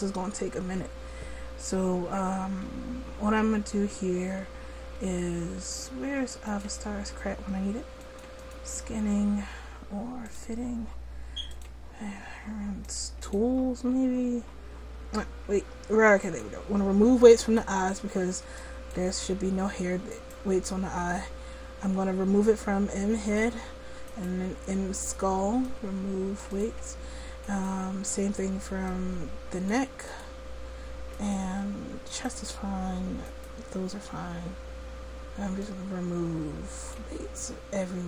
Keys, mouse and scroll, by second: 6.5-17.7 drag, 23.3-24.4 drag, 35.6-37.7 drag.